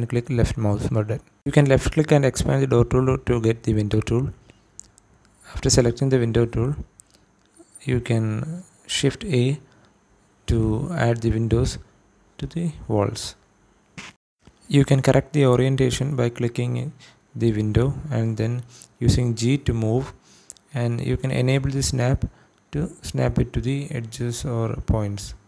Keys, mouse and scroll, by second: 2.3-3.0 drag, 6.4-7.4 drag, 8.1 shift+a, 10.3 click, 13.9 click, 15.5 click, 16.4 Escape, 17.1-17.5 scroll up 2, 18.0 shift+middle click, 18.9 click, 21.8 click, 22.5 g, 23.5 x, 24.6 click.